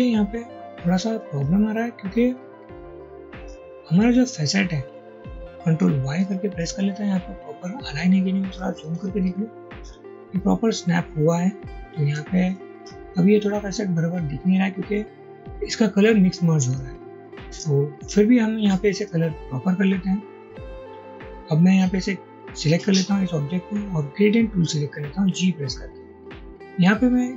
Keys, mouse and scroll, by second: 0.8 ctrl+z, 2.2-3.5 drag, 5.4 double click, 6.2 ctrl+y, 7.3 ctrl+y, 8.6 alt+scroll up 1, 9.1 alt+scroll up 1, 9.9-10.6 alt+scroll down 1, 12.1 ctrl+y, 13.8-14.3 alt+scroll down 1, 24.7 g.